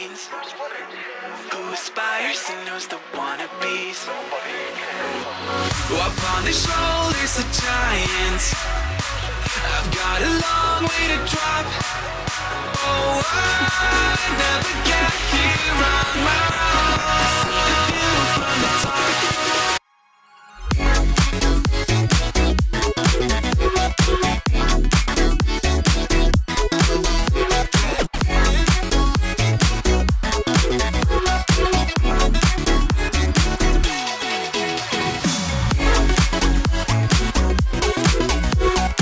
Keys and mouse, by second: 0.9 ctrl+r, 3.0 s, 4.7 click, 5.6 ctrl+z, 6.4 click, 7.3 `, 8.5 click, 9.1-10.2 drag, 11.1 middle click, 11.8 click, 13.9 click, 16.2 z, 16.7 click, 17.8 ctrl+r, 18.8 ctrl+r, 20.4 click, 21.3 alt+click, 22.1 click, 23.0-24.3 drag, 24.6 middle click, 25.3 alt+click, 25.7 middle click, 26.4 alt+click, 27.2 click, 28.6-30.3 drag, 30.7 middle click, 31.5 ctrl+r, 33.1 click, 33.5 x, 35.3 alt+click, 35.7 `, 36.9 click, 37.7 `.